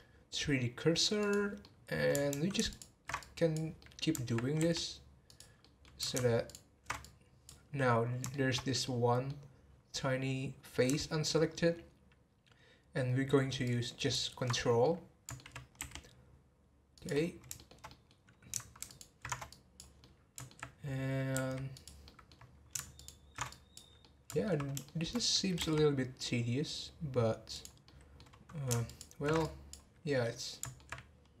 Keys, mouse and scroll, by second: 1.6-2.7 middle drag, 2.7 ctrl+alt+shift+click, 3.1 click, 3.8 middle click, 4.6 r, 5.6 middle click, 6.4 ctrl+alt+shift+click, 7.0-8.3 drag, 8.3 shift+middle click, 8.6 scroll up 2, 8.8-11.9 middle drag, 13.6 ctrl+click, 14.8 middle click, 15.7 r, 17.5-18.9 shift+middle drag, 18.9 ctrl+alt+shift+click, 19.5 click, 20.0-21.3 middle drag, 21.3 r, 22.0 middle click, 23.0 ctrl+alt+shift+click, 23.5 click, 24.0-25.5 middle drag, 25.5 r, 27.8-28.8 middle drag, 28.8 ctrl+alt+shift+click, 29.4 click, 30.2-31.4 middle drag.